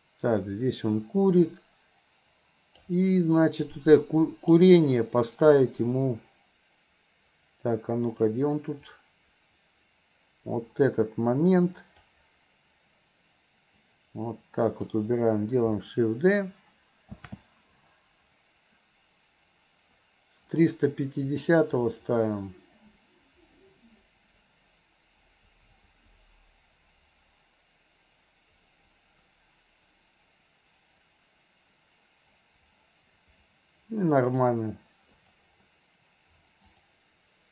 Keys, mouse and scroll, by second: 3.7-4.5 drag, 8.2 click, 9.0-12.2 drag, 13.8-14.9 drag, 21.5 click, 21.9-34.5 drag, 35.2 click, 36.7-37.5 drag.